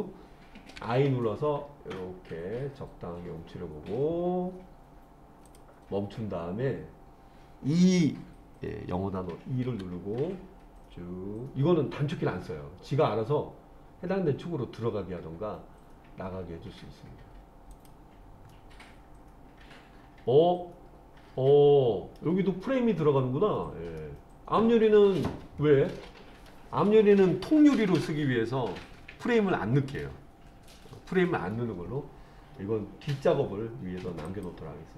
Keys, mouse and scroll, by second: 0.8 i, 5.5-8.6 drag, 9.7 e, 17.8 click, 18.6-22.2 middle drag, 24.0-26.5 middle drag, 34.3 click.